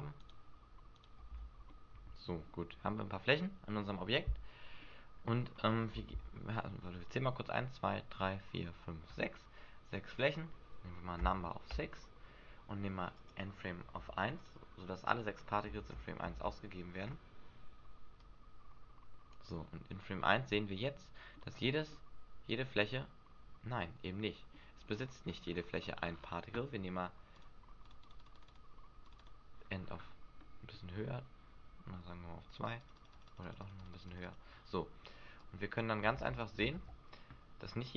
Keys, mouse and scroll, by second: 0.2 shift+right click, 0.9 shift+right click, 1.3 f, 1.6 middle click, 2.7 Tab, 3.1 middle click, 10.1 click, 13.1 click, 15.7 alt+a, 16.3 alt+a, 18.2 click, 20.2 middle click, 21.4-21.8 scroll down 4, 21.9 middle click, 24.5-25.4 scroll up 7, 25.4-25.9 scroll up 8, 25.9 scroll down 4, 27.2 scroll down 5, 27.3 click, 27.9 click, 28.3 click, 29.0 click, 29.2 click, 29.7 scroll down 2, 30.3 middle click, 30.3 scroll down 5, 30.8-31.4 scroll up 2, 31.4 scroll up 3, 32.5 click, 32.7 click, 32.9 click, 32.9 click, 33.1 click, 33.5 click, 33.6 click, 33.9 click, 34.1 click, 34.3 click, 36.1 alt+a, 36.7 alt+a.